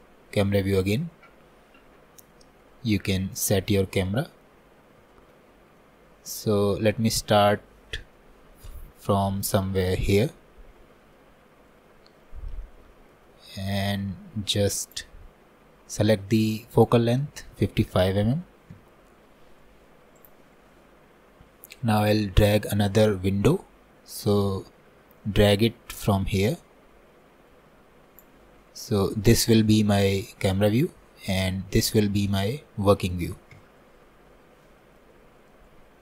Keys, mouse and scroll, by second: 1.8-2.3 scroll down 1, 2.3-4.5 shift+middle drag, 4.5-5.1 scroll up 3, 5.1 shift+middle click, 5.5 scroll down 1, 5.8-7.9 middle drag, 7.9 scroll up 1, 8.2-14.9 middle drag, 14.9-18.4 drag, 18.4 KP_5, 20.2-23.2 drag, 25.4-33.6 drag, 33.6 KP_0, 34.7 middle click, 35.2-35.5 scroll up 2, 35.5-36.0 scroll down 5.